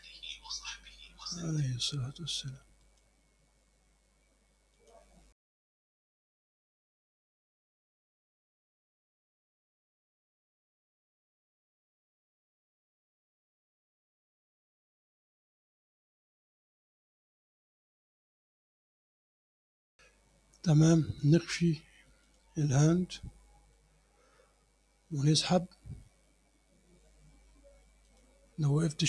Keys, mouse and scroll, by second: 1.4 click, 2.9 click, 4.8 click, 5.5 click, 5.9 click, 6.3 click, 7.1 click, 7.3 click, 8.0 click, 8.3 click, 8.5 click, 9.0 click, 9.2 click, 9.5 click, 9.8 click, 10.1 click, 10.3 click, 10.5 click, 10.9 click, 11.2 click, 11.6 click, 12.1 click, 12.3 click, 12.7 click, 13.0 click, 13.3 click, 13.8 click, 14.3 click, 14.9 click, 15.1 click, 15.3 click, 15.8 click, 16.1 click, 16.6 click, 16.8 click, 17.2 click, 17.9 click, 18.5 click, 19.0 click, 19.5 click, 19.7 scroll down 1, 19.9 middle click, 22.3 click, 22.9 scroll down 1, 23.3 click, 28.1 click.